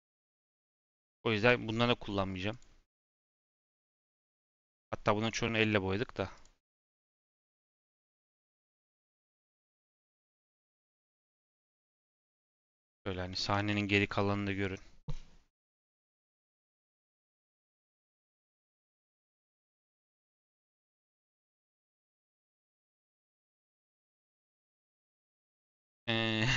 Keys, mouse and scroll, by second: 0.0 click, 0.4 scroll down 2, 0.6-1.4 middle drag, 1.4 /, 2.4 click, 2.8 click, 3.7-4.0 scroll down 1, 4.0 middle click, 4.3 z, 4.8 middle drag, 4.9-6.3 scroll down 4, 6.3 click, 6.9 click, 7.4 click, 9.1 click, 10.9 middle drag, 11.1 scroll down 1, 11.4 /, 11.7 scroll down 1, 11.9 middle drag, 12.1-12.5 scroll up 9, 12.6 shift+middle click, 13.4 ctrl+s, 13.7-16.7 shift+middle drag.